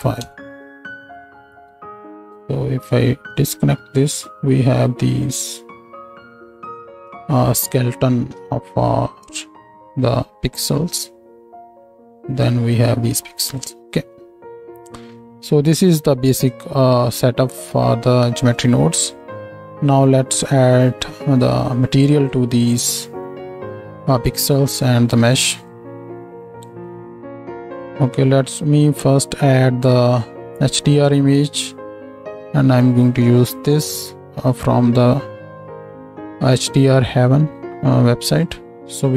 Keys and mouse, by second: 2.9-25.7 ctrl+middle drag, 25.7-30.9 drag, 30.9-38.5 middle drag, 31.2-39.1 drag, 31.2-39.1 right drag, 38.8 z.